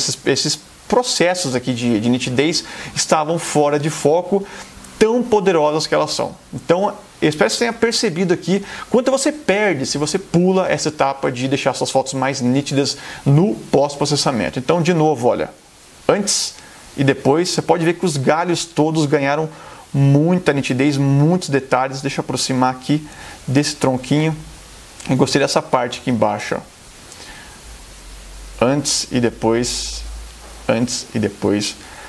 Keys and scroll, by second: 20.8 space, 23.2 super+=, 24.1 super+space.